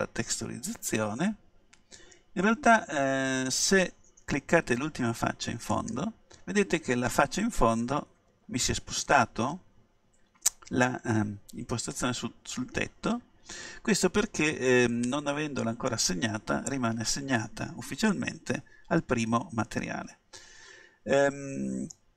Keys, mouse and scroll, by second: 2.7 middle click, 5.8-7.6 right drag, 14.5-16.2 middle drag, 18.2-20.1 middle drag.